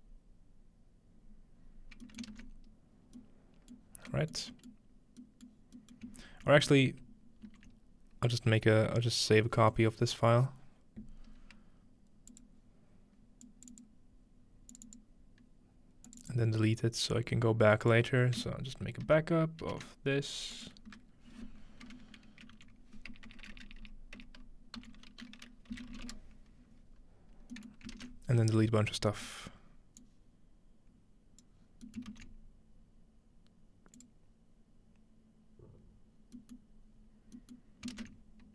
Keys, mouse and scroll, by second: 0.9-2.0 scroll down 2, 2.0-3.2 ctrl+middle drag, 2.6-3.2 scroll down 1, 3.7-4.5 middle drag, 3.9-5.0 scroll down 2, 5.0 shift+middle click, 5.2-5.6 scroll down 1, 5.6 middle click, 6.0 ctrl+middle click, 6.9-8.6 ctrl+middle drag, 9.7-11.3 middle drag, 11.3-12.2 scroll down 2, 12.2 scroll down 1, 12.3-16.3 drag, 17.8 click, 19.0 ctrl+c, 19.6 ctrl+v, 20.5-22.2 drag, 21.0 F2, 22.5 Right, 25.7-26.4 typing, 27.5-28.3 middle drag, 27.9 typing, 28.2-28.8 ctrl+scroll down 1, 28.8 scroll up 1, 28.9 scroll down 1, 29.1-31.4 scroll up 3, 29.7-31.4 middle drag, 30.0-32.0 drag, 31.6-33.5 scroll down 1, 31.9-32.6 typing, 32.0-34.0 ctrl+middle drag, 34.0-35.8 drag, 36.3-37.4 middle drag, 37.6-38.5 middle drag.